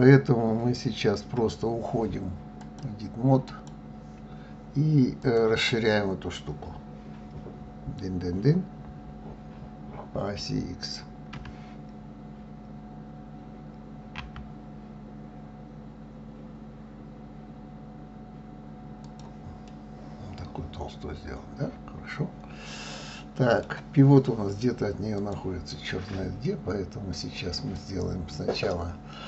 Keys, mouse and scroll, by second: 2.6-5.3 drag, 11.3 s, 19.6-22.7 middle drag, 25.2 click, 27.6-29.2 drag.